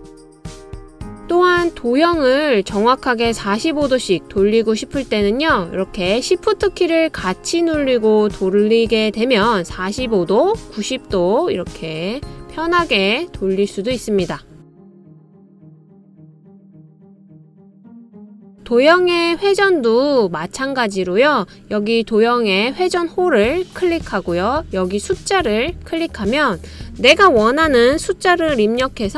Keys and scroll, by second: 28.5-29.1 typing.